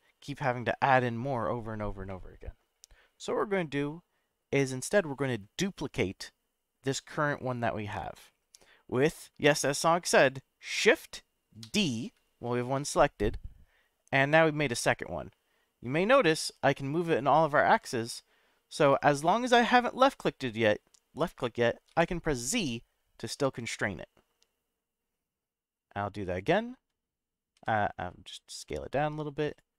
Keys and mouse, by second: 2.1-2.7 middle drag, 11.6 shift+d, 21.9 z, 26.3 click, 27.5 s, 29.4 click.